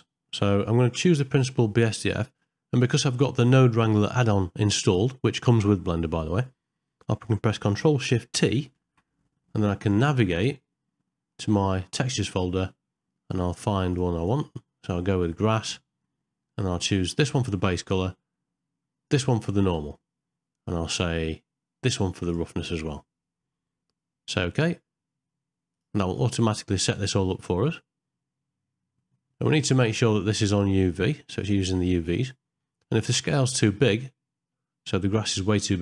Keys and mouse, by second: 2.1 click, 27.9 middle click, 30.3 middle click, 32.7 middle click.